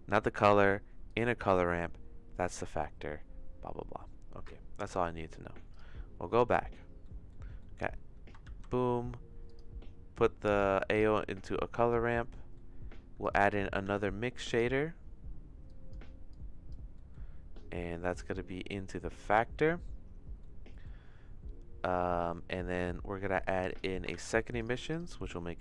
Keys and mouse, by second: 1.0 click, 6.6 middle click, 7.1 middle click, 7.7 middle click, 8.4 shift+a, 11.3 click, 12.4 middle click, 13.2 click, 13.9 shift+d, 15.6 click, 16.3 click, 16.9 middle click, 18.2-19.4 drag, 20.5 middle click, 23.7 click, 24.3 shift+d.